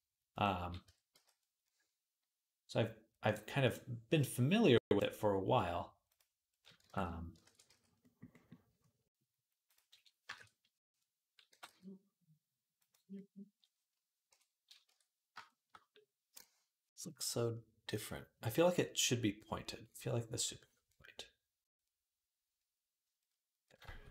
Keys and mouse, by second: 0.1 click, 0.3-3.7 middle drag, 0.7 Tab, 1.0 z, 3.7-12.7 drag, 6.8 ctrl+s, 7.3 ctrl+a, 11.3 g, 12.7-24.1 middle drag, 14.1 KP_7, 14.7 Tab, 23.7 a.